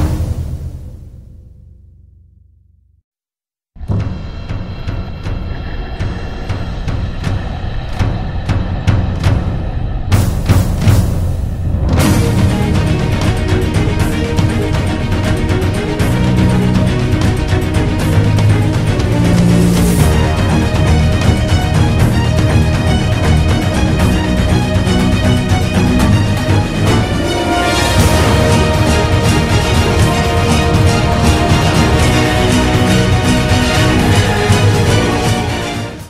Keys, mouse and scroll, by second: 1.3 right click, 7.1 ctrl+z, 12.8 right click, 15.5 ctrl+z.